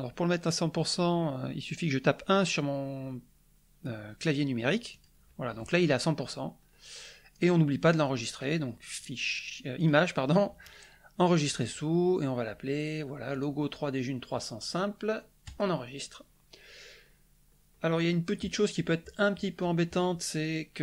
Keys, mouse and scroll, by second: 4.9 click, 6.4-6.9 scroll up 1, 7.3 scroll down 1, 7.7 middle click, 9.7 click, 11.1 click, 13.3 click, 15.4 click, 17.0-17.7 scroll up 2, 17.9 middle click.